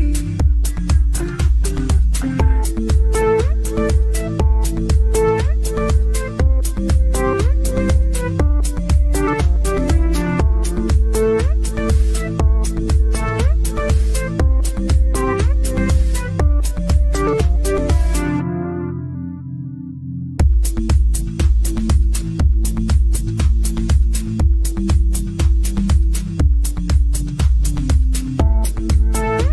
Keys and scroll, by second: 6.5 ctrl+z, 8.7 w, 9.2 d, 12.8 f, 16.8 g.